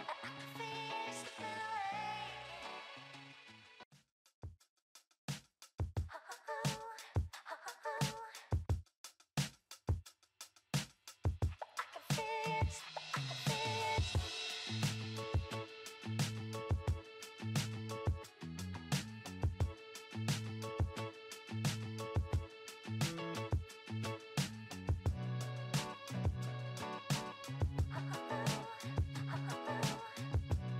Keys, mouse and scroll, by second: 15.8-18.6 drag, 23.7 click, 24.9-26.1 drag, 26.7-27.8 drag, 29.6 click.